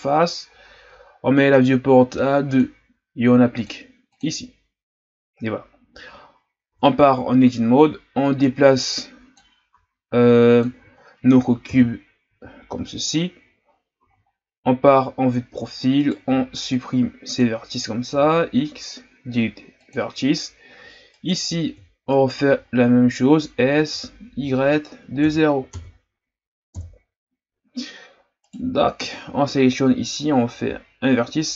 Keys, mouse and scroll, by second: 2.5-6.7 drag, 6.7 Tab, 8.2-9.7 drag, 9.7 s, 10.8-11.7 ctrl+scroll up 4, 11.7 KP_3, 12.5-14.1 ctrl+scroll up 5, 14.1 z, 16.0 right click, 16.2 b, 18.1 x, 21.1 alt+right click, 22.1 alt+right click, 22.6-23.6 scroll up 1, 23.6 s, 26.7 KP_1, 28.5 right click.